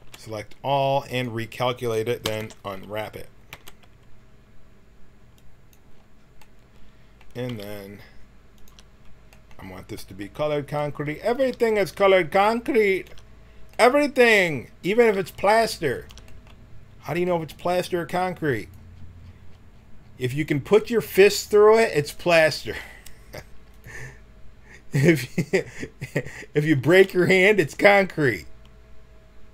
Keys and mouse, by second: 2.2 u, 2.3 u, 3.5 t, 5.3 click, 7.4 g, 11.4 g, 15.0 g, 18.6-22.6 drag, 22.6 s, 24.9 s, 26.7 s.